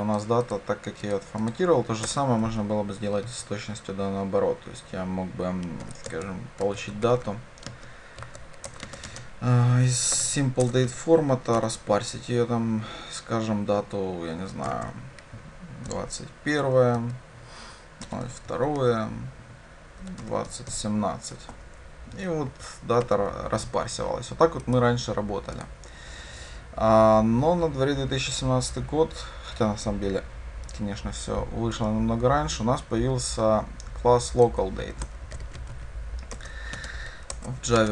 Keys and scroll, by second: 8.7 Return, 25.7 ctrl+shift+F10, 36.5 Return.